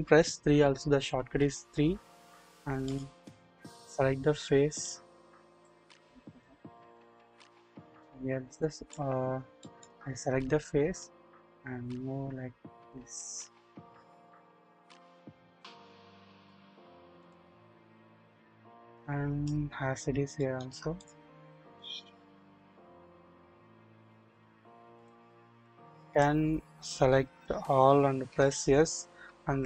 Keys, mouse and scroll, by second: 0.5 3, 2.9 click, 3.8 click, 4.7 click, 5.6 middle click, 6.9 a, 6.9 a, 8.6 middle click, 9.6 shift+middle click, 9.7 shift+scroll up 1, 11.0-16.5 drag, 11.0 scroll up 1, 17.2 click, 17.2 scroll down 1, 18.9 click, 19.7-20.1 scroll up 1, 20.3 shift+middle click, 21.8-24.3 drag, 24.5-25.5 scroll down 1, 25.6 middle click, 27.8-28.3 typing.